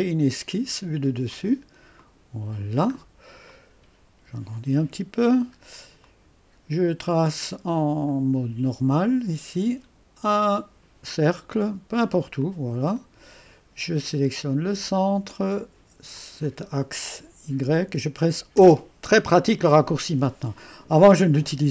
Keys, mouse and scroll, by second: 1.3 click, 2.0 click, 2.9-3.5 scroll up 2, 9.0 click, 10.4 click, 11.5 click, 12.4 click, 12.8 click, 13.0-14.8 right drag, 14.8 click, 16.1 click, 16.6 click.